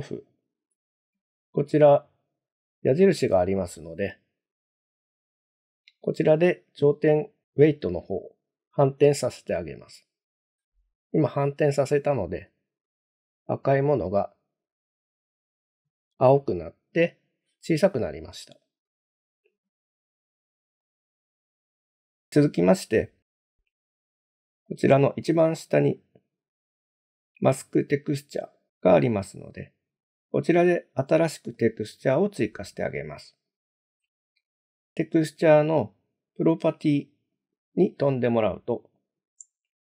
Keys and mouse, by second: 4.8 click, 12.5 click, 15.0 click, 20.8 click, 31.6 click, 37.4 click, 39.0 click.